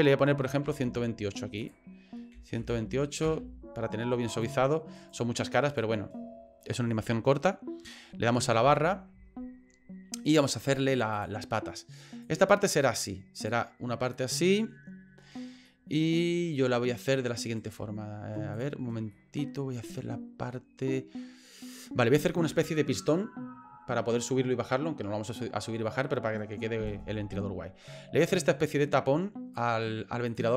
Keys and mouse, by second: 5.0 right click, 5.5 right click, 8.6 KP_Divide, 12.2-13.5 drag, 14.3 middle click, 15.8 middle click, 17.4 right click, 18.5 click, 19.2 middle click, 28.2-29.6 drag, 30.3 click.